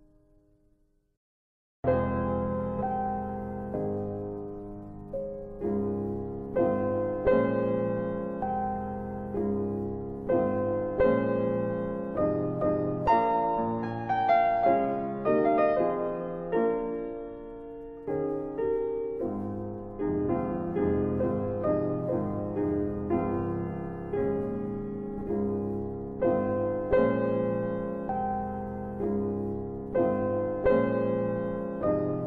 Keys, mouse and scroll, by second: 4.0 click, 6.1 middle click, 7.7 click, 8.2 double middle click, 8.2 scroll down 2, 9.5 click, 12.1 click, 13.9 ctrl+z, 14.6 scroll up 1, 15.1 middle click, 15.5 scroll up 1, 15.9 middle click, 16.8 click, 18.6 alt+w, 19.1 alt+w, 21.6 scroll up 1, 22.4 alt+x, 22.9 alt+middle click, 24.2 click, 24.4 scroll down 2, 25.6 scroll down 1, 25.8 click, 27.6 ctrl+click, 29.6 middle click, 29.6 scroll up 1, 30.2 alt+middle click, 30.7-31.6 scroll up 1.